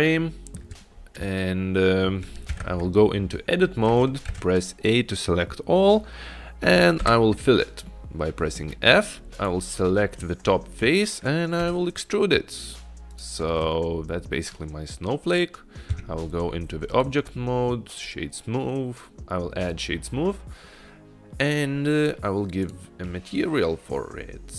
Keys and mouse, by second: 2.6 Tab, 4.4 a, 7.0 f, 8.0 middle click, 9.4 click, 10.8 middle click, 11.7 e, 16.0 Tab, 17.0-18.2 right drag, 22.7 click.